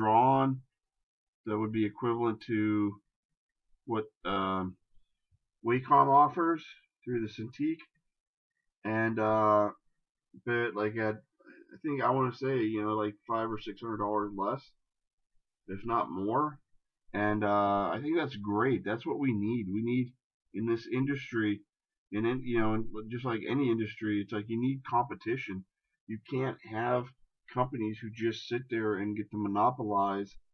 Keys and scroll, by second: 17.7 shift+space.